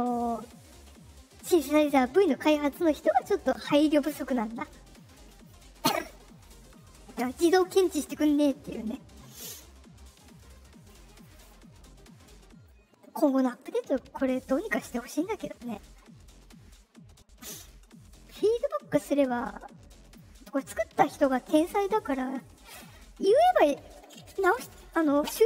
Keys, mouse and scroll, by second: 12.6-13.1 drag, 18.2-20.1 drag.